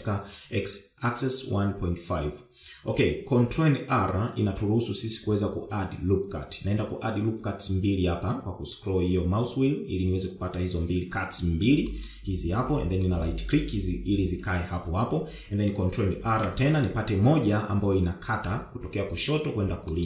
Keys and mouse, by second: 4.1 ctrl+r, 16.4 ctrl+r.